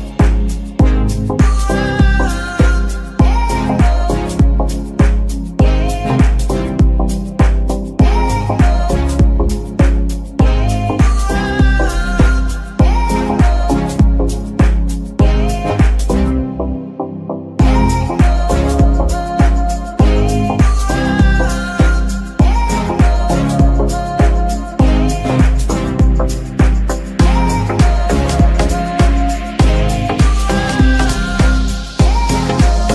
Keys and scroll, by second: 7.0 ctrl+Tab, 10.7 g, 12.2 Escape, 13.1 g, 14.7 Escape, 15.2 Tab, 15.7 g, 16.1 Escape, 20.7 ctrl+Tab, 21.4 g, 24.7 Escape, 28.8 g, 29.5 Escape, 31.0 shift+g, 32.1 Escape.